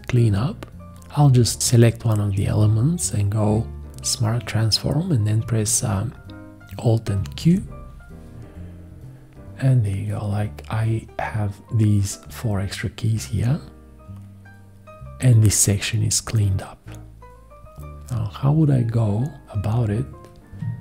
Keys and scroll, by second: 1.2 1, 7.4 alt+q.